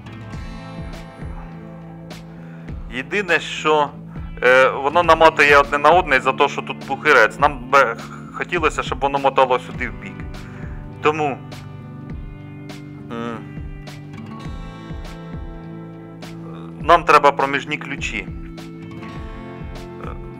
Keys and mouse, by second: 14.8 middle click.